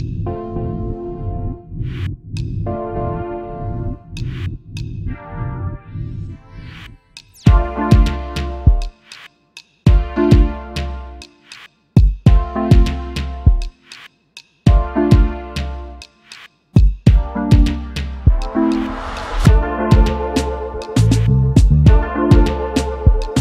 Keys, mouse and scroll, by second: 2.8 double click, 6.8-7.2 alt+scroll up 1, 11.1-11.6 alt+scroll down 1, 12.0 space, 12.1 double click, 12.6-13.0 alt+scroll up 1, 13.5 double click, 17.4 double click, 19.6 ctrl+g, 20.4 shift+click.